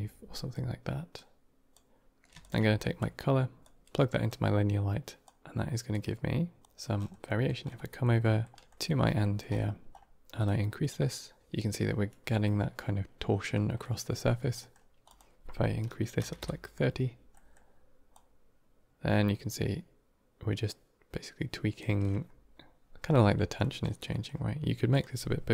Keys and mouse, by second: 0.2 middle click, 1.0 click, 2.3 ctrl+shift+click, 3.5-4.1 drag, 5.1-5.8 drag, 6.5 click, 7.1 middle click, 7.6 middle click, 8.1 middle click, 8.7 middle click, 9.1 middle click, 10.3-11.4 drag, 13.7 middle click, 14.5 middle click, 14.9-16.8 drag, 17.2 middle click, 18.0-21.7 drag, 23.5 middle click, 24.0 middle click, 24.8-25.5 drag.